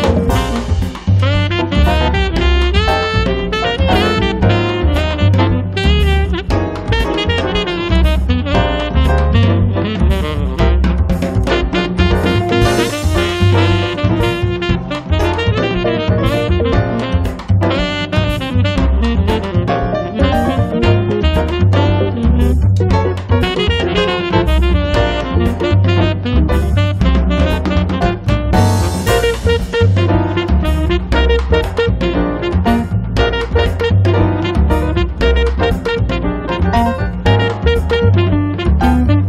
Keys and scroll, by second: 5.7-6.7 typing, 7.8 space, 7.9 Escape, 15.4 space, 18.3 Escape, 18.8 space, 19.3 Escape, 23.9 Escape, 24.2 space, 24.7 Escape, 29.1 space, 29.5 Escape, 33.5 Escape, 33.8 space, 34.4 Escape, 38.1 Escape, 38.6 space, 39.1 Escape.